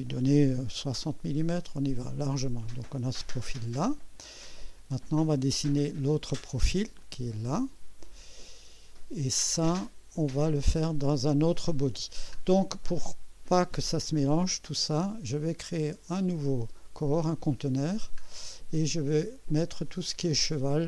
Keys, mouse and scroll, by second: 0.3-1.2 typing, 2.5-4.1 drag, 4.5 scroll down 2, 7.0-8.2 drag, 8.5 scroll down 2, 10.7 scroll down 2, 12.3 scroll up 2, 16.1 click, 17.4-17.9 scroll down 3, 20.7-20.8 drag.